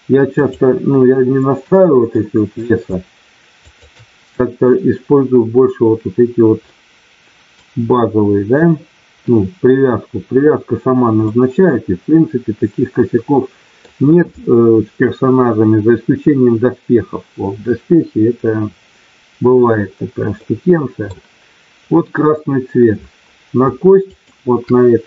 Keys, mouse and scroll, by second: 2.1 middle click, 3.6 shift+click, 6.6 middle click, 11.4-13.9 middle drag, 20.4 middle click, 24.1 shift+click.